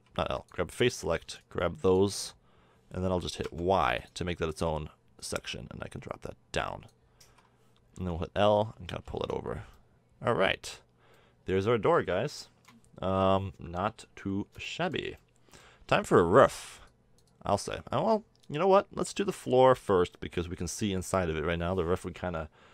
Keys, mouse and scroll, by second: 1.2 b, 3.4 y, 7.3 a, 7.9 l, 9.0 a, 9.2 Tab, 15.8 Tab, 16.9-18.3 middle drag, 18.3-18.7 drag, 19.3 a, 19.4 Tab.